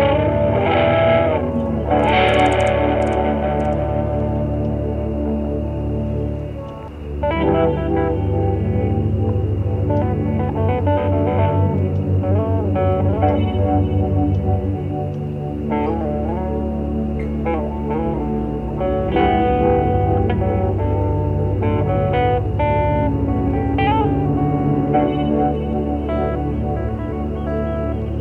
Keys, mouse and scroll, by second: 0.1 shift+click, 1.8 shift+middle click, 2.8 shift+click, 7.0 shift+click, 7.4 shift+click, 7.8 shift+click, 8.4 shift+click, 8.9 shift+middle click, 9.6 shift+middle click, 12.4 shift+click, 12.7 shift+click, 13.1 shift+click, 13.8 shift+click, 14.6 shift+click, 15.0 shift+click, 15.7 shift+click, 16.4 shift+click, 17.0 shift+click, 18.7 shift+click, 19.3 shift+middle click, 19.9 shift+middle click, 21.1 click, 21.7 click, 22.6 click, 22.9 middle click, 23.8-26.1 shift+drag, 26.1 shift+click, 26.5 shift+click, 27.5 shift+click.